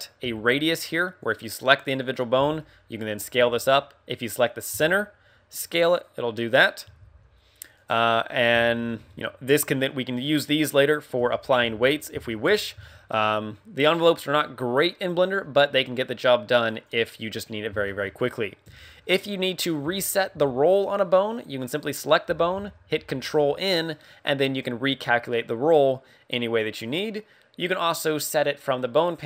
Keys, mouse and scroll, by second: 0.2 s, 1.3 right click, 1.9 right click, 2.3 s, 3.2 right click, 4.1 right click, 4.7 s, 6.7 right click, 6.9 alt+s, 7.6 right click, 7.9 scroll up 3, 8.5 shift+middle click, 8.9 KP_1, 11.2 Tab, 11.5 Tab, 12.2 shift+middle click, 12.7 Tab, 16.6 click, 17.4 scroll down 4, 17.8 shift+middle click, 18.1 scroll up 3, 18.6 Tab, 18.6 scroll up 1, 18.9 scroll down 1, 19.2 middle click, 19.8 a, 20.3 a, 21.8 right click, 22.9 ctrl+n, 27.6 click.